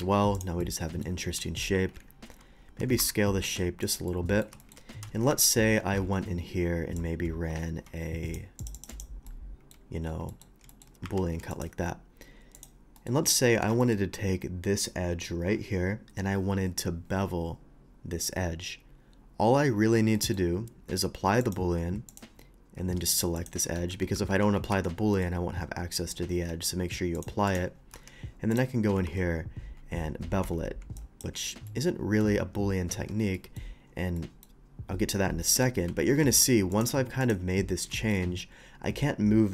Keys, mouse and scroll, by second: 0.0 q, 0.3 click, 0.6-1.0 middle drag, 1.6 KP_1, 2.8 s, 3.0 y, 3.7 x, 3.8 click, 4.1-4.4 middle drag, 4.6 shift+middle click, 5.2 KP_1, 5.3 KP_1, 6.0 d, 7.0-8.3 drag, 8.6 ctrl+click, 8.7 ctrl+click, 8.9 ctrl+click, 9.3-9.7 ctrl+middle drag, 10.0 ctrl+middle click, 10.3 ctrl+middle click, 10.7 shift+middle click, 11.1 q, 11.5 click, 12.5 click, 13.0 middle click, 13.8 shift+middle click, 20.1 middle drag, 21.4 click, 22.1 click, 22.8 Tab, 23.4 click, 23.8 ctrl+z, 24.1 ctrl+z, 24.7 Tab, 25.1 middle click, 26.0 middle click, 27.1 click, 27.5 click, 28.5 click, 31.0 shift+click, 32.9 Tab, 33.3 middle drag, 34.2 middle drag, 35.4 middle click, 36.5 alt+v, 36.7 click, 37.2 click, 38.0 shift+middle click.